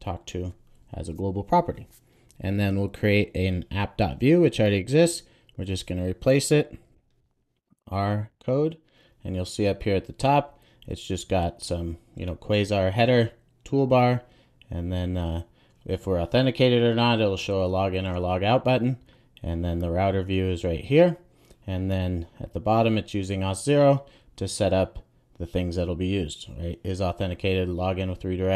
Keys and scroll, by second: 5.7 super+a, 7.6 Return, 8.2 super+s.